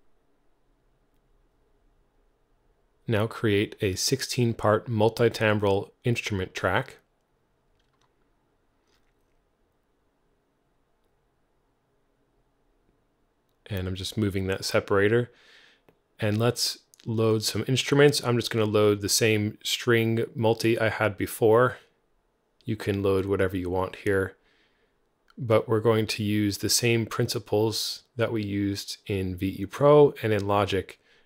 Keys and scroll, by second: 0.0-0.9 typing, 2.0 alt+super+n, 6.0 Return.